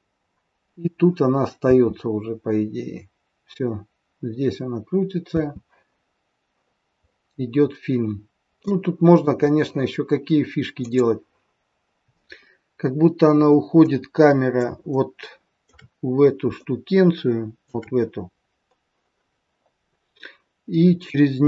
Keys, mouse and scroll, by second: 18.0 scroll up 1, 19.4 scroll down 1.